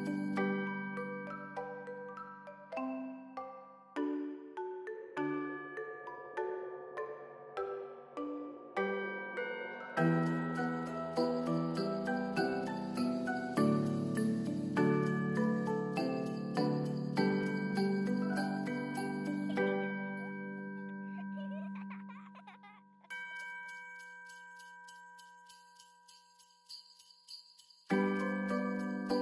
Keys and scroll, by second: 7.3 ctrl+s, 22.2 ctrl+s, 25.3 ctrl+d, 26.7 ctrl+d.